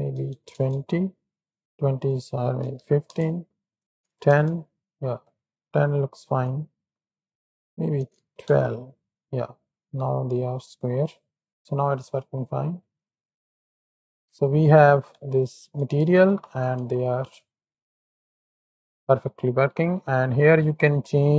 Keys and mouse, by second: 2.0-3.1 drag, 3.7 click, 4.9 click, 6.7 shift+click, 7.5-8.5 drag, 10.0 drag, 11.2 click, 14.0 click, 16.1 alt+a, 16.3 shift+Right, 16.6 shift+Left, 16.8 space, 18.5 click, 19.1 space, 19.6 click, 21.0 click.